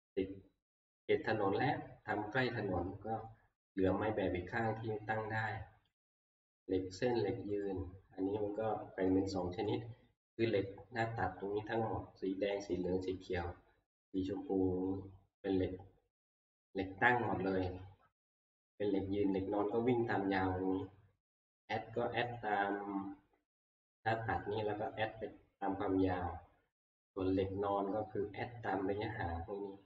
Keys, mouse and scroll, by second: 0.8 middle click, 0.8 click, 6.0 click, 8.5 middle click, 8.6 middle click, 8.7 middle click, 9.5 middle click, 9.7 middle click, 24.9 scroll.